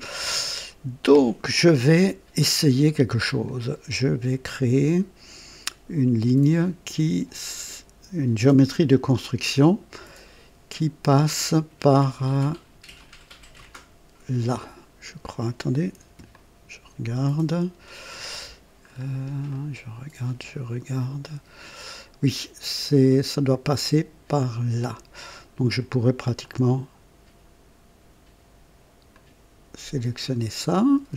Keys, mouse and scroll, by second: 3.4-4.4 drag, 16.3-18.4 ctrl+alt+drag, 18.8-19.2 scroll up 2, 19.5 right click, 26.4 click, 29.1 click.